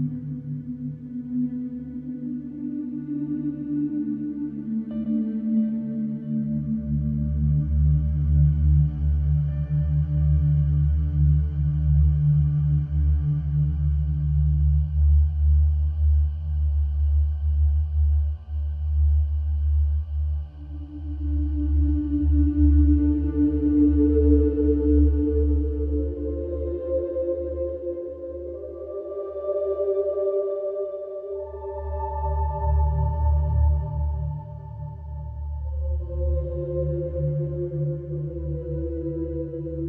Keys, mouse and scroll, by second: 1.0 click, 1.3 right click, 2.3 click, 3.5 right click, 4.6 click, 5.1 right click, 6.3 click, 7.9 click, 8.5 click, 9.9 e, 10.4 x, 11.7 click, 13.0 click, 14.0 KP_Subtract, 14.3 KP_1, 14.6 KP_0, 16.2 click, 18.5 click, 19.0 middle click, 19.8 right click, 20.7 click, 21.1 middle click, 22.1 click, 23.2 click, 24.2 ctrl+shift+a, 26.7 alt+q, 28.5 right click, 30.4 click, 32.3 right click, 34.9 ctrl+a, 35.7 click, 37.0 right click, 38.0 click.